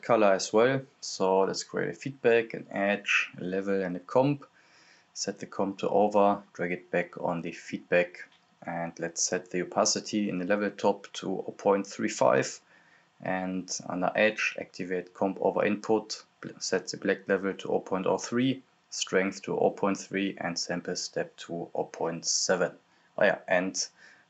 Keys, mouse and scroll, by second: 0.0-0.6 typing, 1.1 click, 3.0 right click, 3.2 c, 3.6-8.2 drag, 8.2 click, 9.8-13.7 drag, 17.0 Return, 17.8-20.2 drag, 20.3-22.4 drag, 22.6 click.